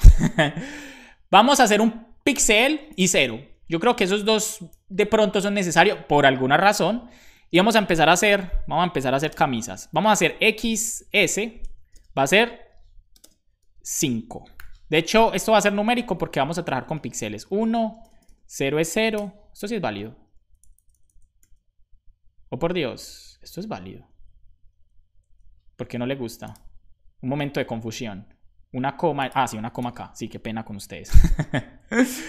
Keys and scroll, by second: 8.2 BackSpace, 8.3 Tab, 9.2 ', 9.2 space, 10.4 x, 11.0 s, 11.3 Right, 11.8 space, 13.2 ', 13.2 space, 14.5 5, 14.9 Up, 15.0 Up, 15.4 Left, 15.5 Left, 15.7 Left, 17.5 Right, 18.0 BackSpace, 20.4 Up, 20.6 Left, 24.1 Right, 24.2 Right, 24.4 Right, 24.7 Left, 25.2 Left, 31.1 super+j.